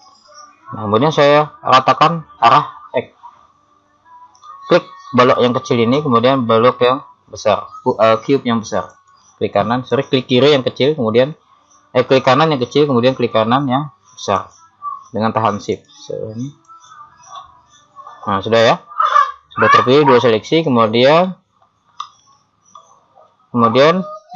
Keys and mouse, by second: 8.9-11.5 right drag, 11.5 middle click, 14.3-17.3 right drag, 18.7 middle click, 21.2 middle click, 22.3 KP_7.